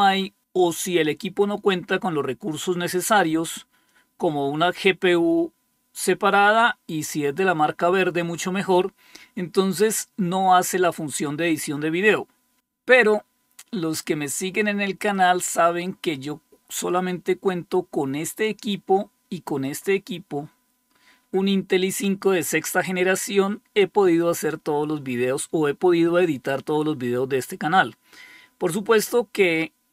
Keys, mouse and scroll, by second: 15.0-18.4 drag, 19.5 click.